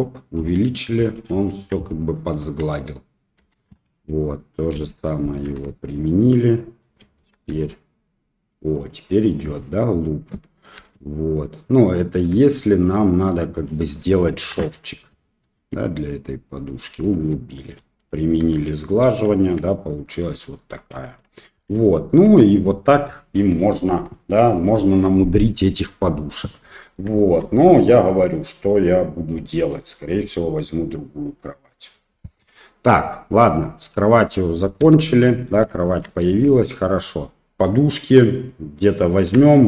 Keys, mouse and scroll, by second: 0.4-0.9 middle drag, 1.4 shift+middle click, 2.1 middle click, 2.4 Tab, 3.4 Tab, 4.8 ctrl+a, 5.2 middle click, 5.5 Tab, 6.1 middle click, 7.5 ctrl+r, 10.8 ctrl+b, 14.4 ctrl+KP_Subtract, 15.5 s, 17.2 Tab, 17.5-18.8 middle drag, 18.5 ctrl+3, 19.4 shift+middle drag, 19.7 middle click, 20.5 click, 21.4 middle drag, 21.9 shift+middle click, 23.1-23.7 middle drag, 24.2 middle click, 26.6-27.0 middle drag, 27.2 shift+middle drag, 27.9-28.4 middle drag, 33.7 click, 34.8 Delete, 35.3 middle drag, 35.9 shift+middle drag, 36.3 click, 39.5 shift+middle drag.